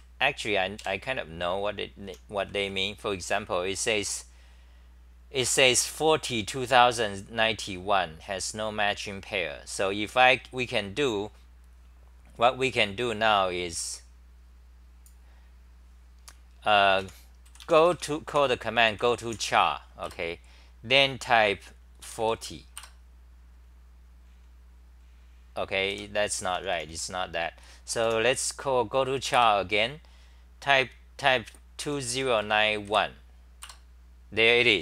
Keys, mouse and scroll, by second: 0.0 super+c, 0.8 ctrl+shift+Tab, 1.8-3.1 typing, 5.4 2, 8.4 typing, 13.5-14.9 typing, 17.1 a, 20.1 Return, 22.8 Return, 25.7-28.2 typing, 29.4 Return, 33.7 Return.